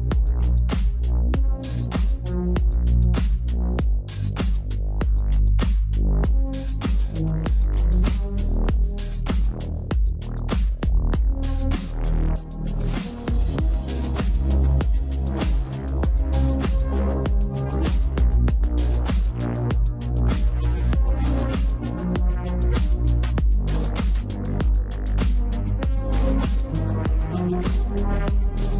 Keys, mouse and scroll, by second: 3.6-8.6 drag, 9.9 click, 11.3 shift+click, 12.1 shift+d, 15.4 r, 18.2-20.6 drag, 21.6 click, 22.7 shift+click, 23.4 shift+click, 24.4 shift+click, 25.0 shift+d, 28.3 r.